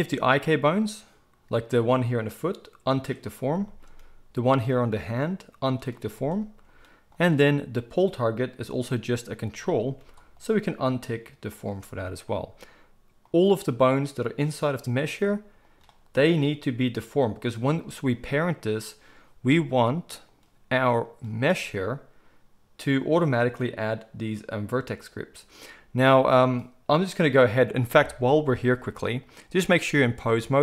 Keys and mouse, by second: 0.3 click, 3.0-4.5 middle drag, 4.5 click, 4.6-5.7 middle drag, 5.7 click, 5.8-6.6 middle drag, 7.2-10.0 drag, 10.0 g, 11.5 click, 13.3 click, 14.2-16.2 drag, 19.8-21.1 drag, 21.1-23.0 middle drag, 23.0 click, 23.1-29.3 middle drag, 29.3-30.6 drag.